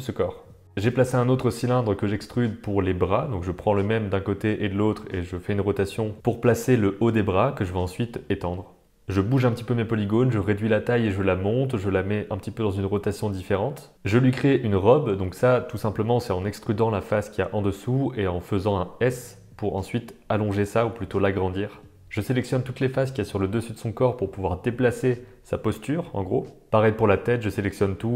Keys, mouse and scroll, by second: 0.3 middle click, 0.5 Tab, 0.6 middle click, 1.5 super+middle click, 2.0 shift+super+d, 2.7 r, 3.7 r, 4.5 g, 5.0 g, 6.0-6.6 middle drag, 6.9 middle click, 7.2 Tab, 7.4 click, 8.1 click, 8.4 shift+middle click, 8.6 click, 8.9 shift+click, 9.2 g, 9.6 middle click, 9.8 s, 11.0 r, 11.8 Tab, 11.9 middle click, 12.8 Tab, 13.1 shift+middle click, 13.7 click, 13.9 super+middle click, 14.1 super+s, 15.2 e, 16.1 middle click, 16.7 middle click, 16.9 click, 18.0 g, 18.4 middle click, 19.2 g, 19.3 middle click, 19.6 click, 19.8 g, 20.4 g, 20.7 middle click, 21.1 g, 21.6 Tab, 21.7 middle click, 21.9 middle click, 22.7 middle click, 23.6 b, 24.4 middle click, 25.2 click, 25.8 g, 26.1 g, 26.5 r, 26.7 middle click, 26.9 middle click, 27.4 click, 27.6 shift+click, 27.7 shift+click, 27.9 middle click.